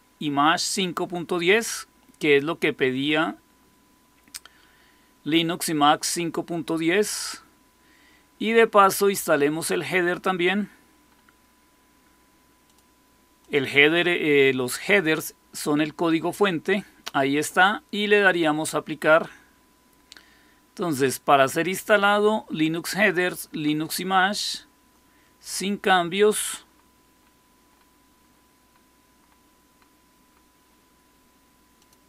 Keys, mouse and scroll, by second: 1.3 click, 1.5 click, 9.0-12.5 scroll up 1, 12.5 click, 13.3 click, 18.2 click, 20.9 click, 24.2 click, 31.7 click.